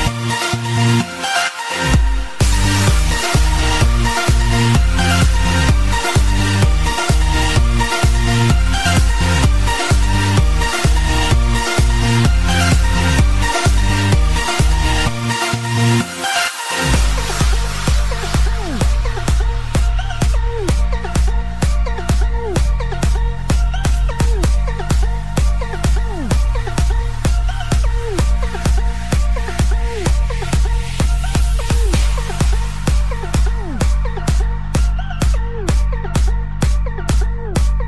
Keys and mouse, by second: 0.7 click, 1.3 click, 8.4 click, 17.5 click, 18.1 space, 21.7 click, 22.3 click, 27.1 click, 28.5 u, 30.8 click, 30.8 u, 33.3 click, 34.6 click, 34.6 u, 35.6 click, 35.6 u, 36.6 click, 36.6 u.